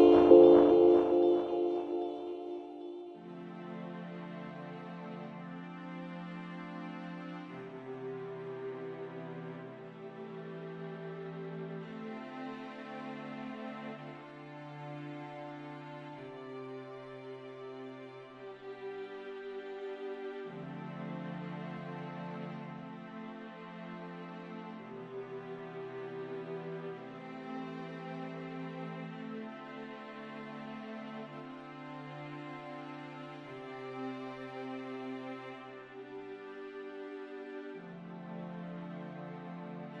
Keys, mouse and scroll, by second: 5.1 g, 7.0 click, 8.0 g, 9.4-12.4 drag, 12.8 click, 13.9 click, 14.5 click, 15.7-18.9 drag, 19.1 click, 21.2 click, 22.9-28.6 drag, 28.6 ctrl+z, 29.2-31.7 drag, 35.0 click, 36.4 shift+a, 37.1 click, 38.3-40.0 drag.